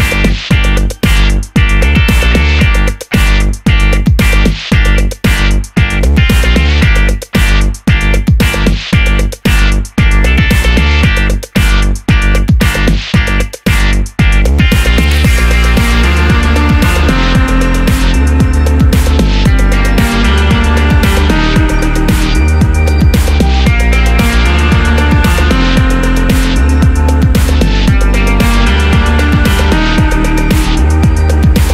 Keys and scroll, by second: 16.7 super+d.